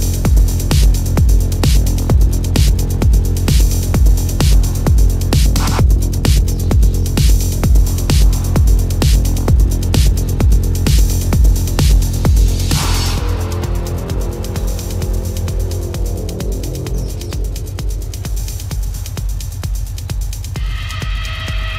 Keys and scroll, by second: 2.4 ctrl+=, 3.4 space, 8.1 space, 9.2 space, 9.6 ], 15.1 ctrl+=, 15.5 ctrl+alt+z, 16.1 ctrl+-, 16.5-18.6 typing, 16.7 ctrl+-.